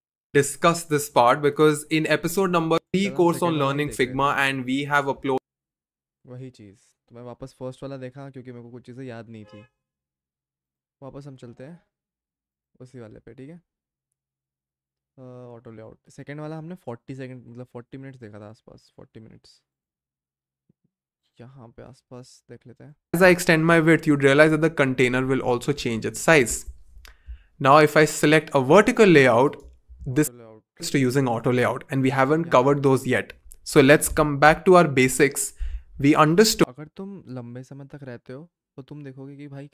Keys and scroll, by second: 24.4 shift+Down, 24.6 shift+Down, 30.7 v, 35.0 BackSpace.